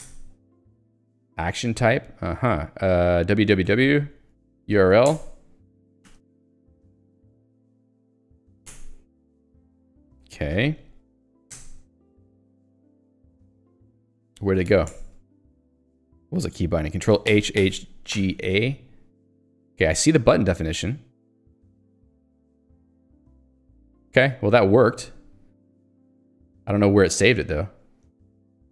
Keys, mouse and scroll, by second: 0.1 Return, 3.3 w, 4.6 ctrl+j, 5.1 Return, 5.8-9.0 typing, 10.7 ctrl+alt+j, 11.3 ctrl+j, 11.6 Return, 12.4 k, 13.2 ctrl+s, 15.0 Return, 18.2 g, 18.5 a, 20.7 Return, 25.0 Return, 25.9 Escape, 26.3 click, 26.5 Escape.